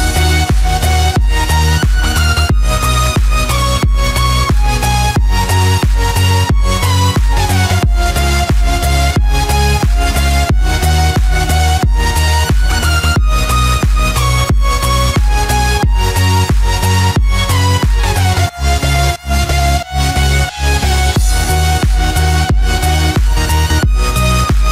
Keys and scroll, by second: 7.3 ctrl+=, 15.4 ctrl+z.